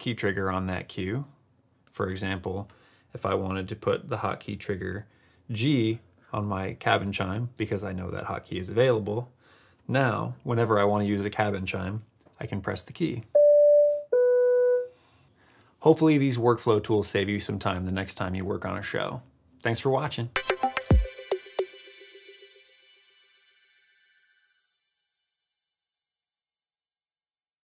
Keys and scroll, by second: 4.8 g, 13.1 g.